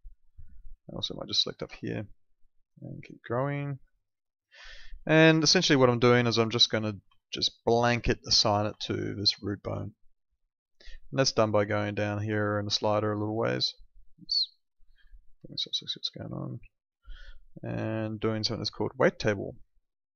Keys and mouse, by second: 0.4 alt+middle click, 1.1 ctrl+shift+click, 3.4 click, 4.6 alt+middle click, 5.3 alt+middle click, 7.1 alt+middle click, 8.7 alt+middle click, 9.4 alt+middle click, 11.3 click, 14.0 click.